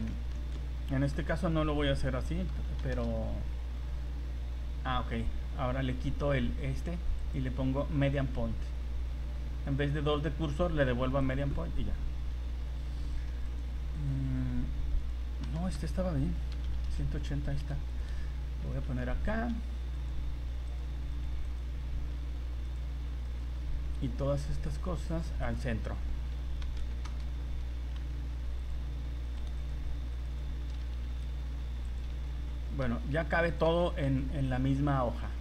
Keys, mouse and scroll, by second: 0.3 ctrl+z, 1.2 r, 4.5 g, 7.2 click, 13.9 shift+right click, 15.4 r, 18.6 shift+f, 18.9 g, 20.7 right click, 22.1 shift+g, 23.3 right click, 24.0 g, 26.2 r, 27.9 g, 29.3 right click, 31.0 shift+g, 32.1 a, 32.3 a, 32.9 s, 34.0 g.